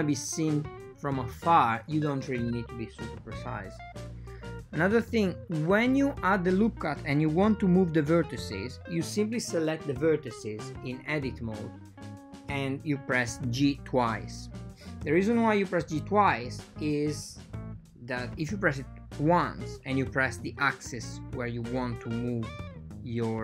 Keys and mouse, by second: 0.1 ctrl+r, 4.0 ctrl+r, 5.5 ctrl+r, 7.5 ctrl+r, 10.0 ctrl+r, 14.4 ctrl+r, 16.0 ctrl+r, 18.8 click, 19.1 right click, 19.6 g, 22.9 shift+g.